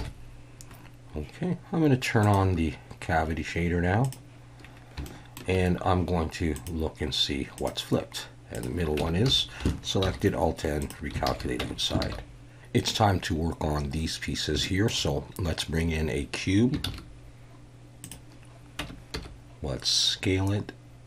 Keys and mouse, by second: 0.0 KP_1, 2.2-4.3 drag, 5.1-5.4 shift+drag, 6.7-8.0 drag, 8.5 click, 9.0 Tab, 9.3 a, 10.0 alt+n, 11.3 alt+a, 11.6 Tab, 12.0 alt+a, 14.6 shift+click, 16.8 shift+a, 18.8 Tab, 19.1 s.